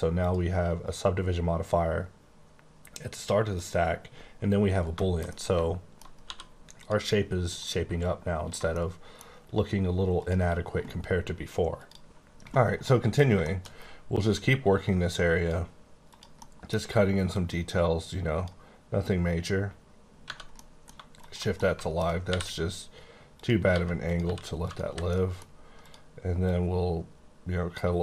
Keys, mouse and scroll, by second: 0.2 click, 3.5 click, 4.9 shift+middle click, 5.2 shift+scroll down 1, 5.3 middle click, 6.2 d, 6.8 click, 7.5 click, 8.7 middle click, 10.2 click, 13.4 shift+middle click, 13.6 shift+scroll up 3, 14.3 click, 16.1 click, 16.3 middle click, 17.3 click, 20.4 scroll down 1, 20.6 middle click, 21.2 shift+click, 21.5 middle click, 22.2 r, 23.3 click, 23.6 g, 24.0 click, 24.2 r, 24.6 click, 24.8 h, 25.0 middle click, 25.4-25.8 scroll up 2, 25.8 click, 26.4 click.